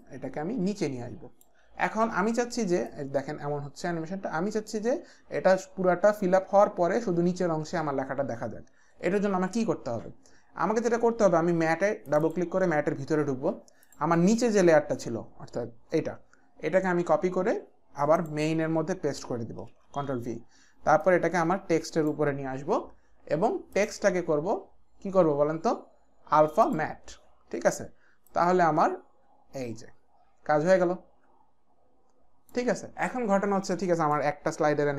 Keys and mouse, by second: 0.0 click, 2.8 click, 12.0 click, 12.3 click, 17.4 ctrl+c, 18.2 click, 19.7 ctrl+v, 21.0 click, 23.7 click, 26.7 click, 28.3 click, 34.1 click.